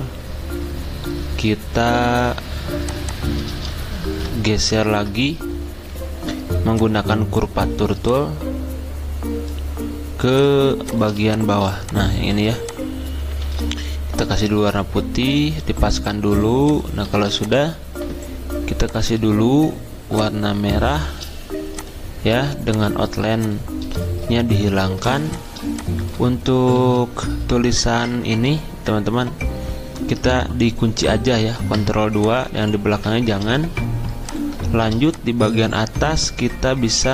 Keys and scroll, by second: 4.0 z, 4.8 ctrl+z, 17.1 d, 26.7 ctrl+z, 31.5 ctrl+2, 32.9 ctrl+z.